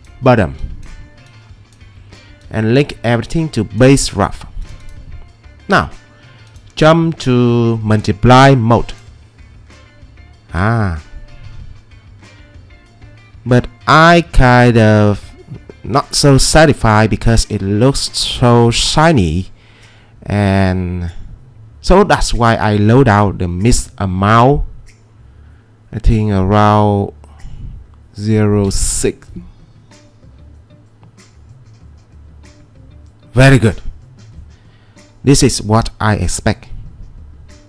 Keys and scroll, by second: 28.6 6, 28.9 Return.